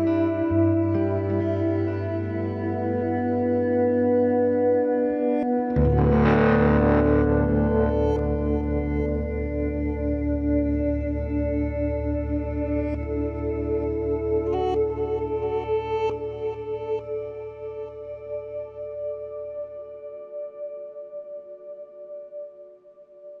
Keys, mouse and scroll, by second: 0.5 b, 1.3 g, 3.0 ctrl+r, 3.7-4.7 right drag, 4.5 b, 4.9 g, 6.7 ctrl+r, 10.9 right click, 11.5 KP_Decimal, 12.8 b, 13.4 g, 14.6 right click, 14.8 b, 15.2 g, 16.6 b, 17.0 g, 18.1 right click, 18.7-20.1 right drag, 18.9 b, 19.3 g, 21.4 g, 23.3-23.4 drag.